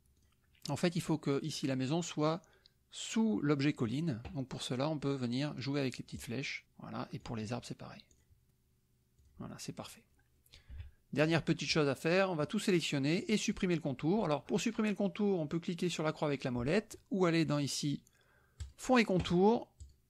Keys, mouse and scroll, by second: 0.1 click, 6.2 click, 7.3 click, 8.1 click, 9.2 click, 9.9 click, 10.7 KP_Subtract, 12.4-13.7 drag, 18.6 click, 19.8 click.